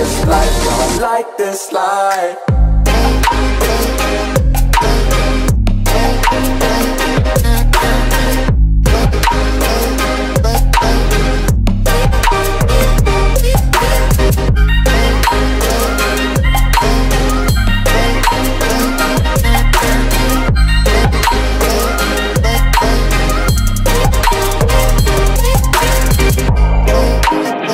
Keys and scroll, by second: 6.6 space, 11.0 Down, 12.7 Left, 13.0 Down, 13.5 Right, 15.1-16.0 typing, 16.5 Return, 21.6 Return.